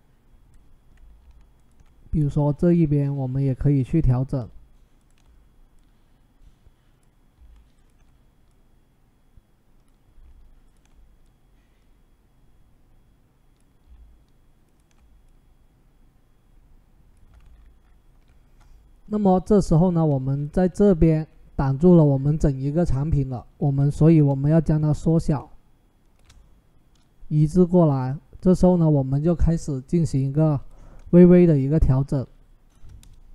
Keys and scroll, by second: 23.5 ctrl+t, 32.8 Return.